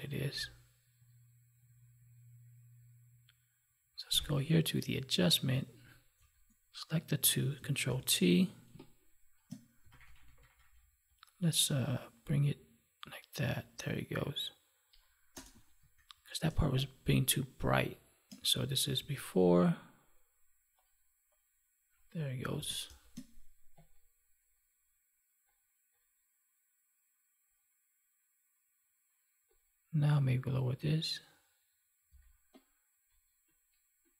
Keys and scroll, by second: 7.8 ctrl+t, 15.8 ctrl+1, 18.9 ctrl+z, 22.4 ctrl+s, 22.8 space, 32.0 space.